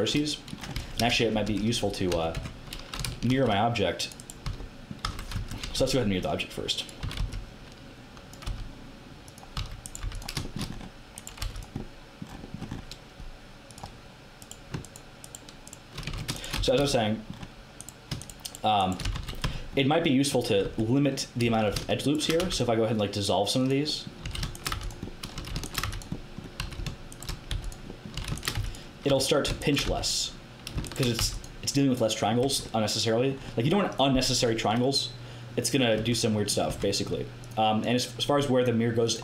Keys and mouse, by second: 0.7 Tab, 1.0-2.9 typing, 2.3 Tab, 3.2 ctrl+r, 4.4 z, 5.0 z, 5.3 KP_1, 5.6 a, 7.0 z, 7.1 b, 8.4 x, 9.5 z, 10.0 x, 11.4 x, 13.6 click, 16.1 ctrl+z, 16.5 f, 16.7 a, 17.8 right click, 19.0 f, 19.1 a, 19.4 Tab, 20.6 Tab, 22.3 x, 24.2-29.8 typing, 31.1 x, 32.3 Tab, 35.9 Tab, 36.6 Tab.